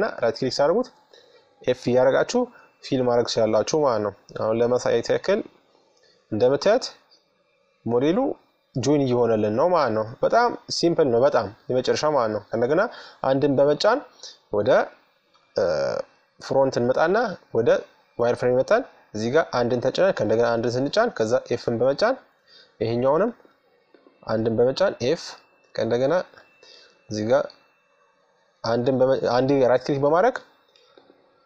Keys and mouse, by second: 3.2-5.8 drag, 5.9 middle click, 7.0 middle click, 8.1 middle click, 12.2 KP_1, 14.0-15.6 middle drag, 15.8-17.6 drag, 17.9-20.4 right drag, 19.9 f, 21.8-24.5 right drag, 23.5 f, 25.4-27.4 middle drag, 27.4-29.2 right drag, 29.5-31.2 right drag, 31.0 f.